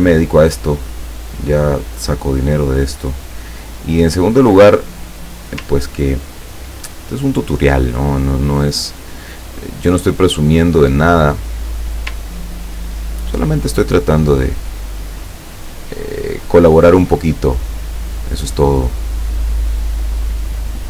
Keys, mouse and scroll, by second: 0.3-2.3 drag, 3.0-5.5 drag, 8.1-9.9 drag, 10.5-12.0 drag, 12.7-13.0 ctrl+scroll down 2, 13.7 ctrl+middle click, 15.0-15.4 scroll up 2, 15.4 scroll down 2, 16.9 click, 18.6-20.6 drag.